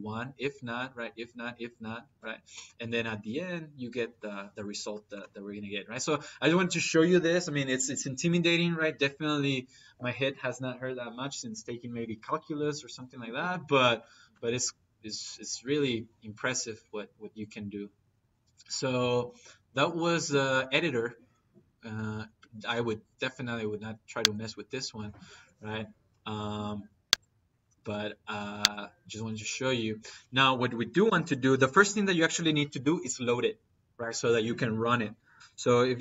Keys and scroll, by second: 30.9 Escape, 34.9 Escape, 35.4-36.0 typing, 35.8 Left.